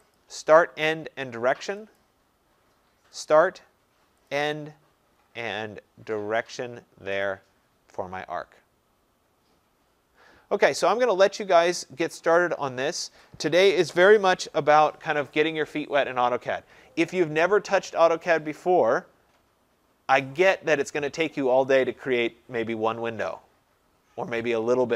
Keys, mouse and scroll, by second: 0.2 click, 2.0 click, 3.3 click, 7.3 click, 10.6-11.8 scroll, 11.8-12.4 scroll, 17.4 scroll.